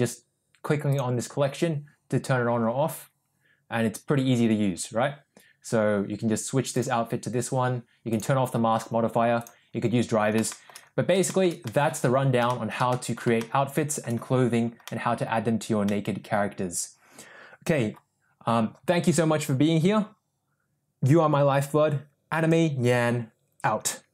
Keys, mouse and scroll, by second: 1.0 click, 7.2 click, 8.2 click, 9.6 click, 10.5 shift+middle drag, 11.3 shift+middle click, 11.7 middle click, 12.5 shift+middle click, 12.9 middle drag, 13.4-14.0 shift+middle drag, 14.9 middle click, 15.9-17.7 middle drag.